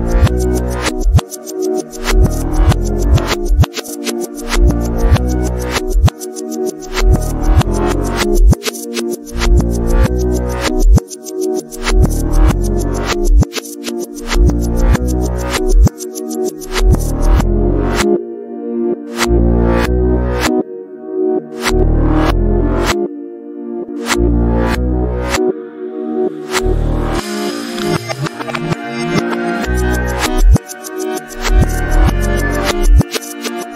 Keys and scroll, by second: 0.9 shift+5, 5.5 ctrl+t.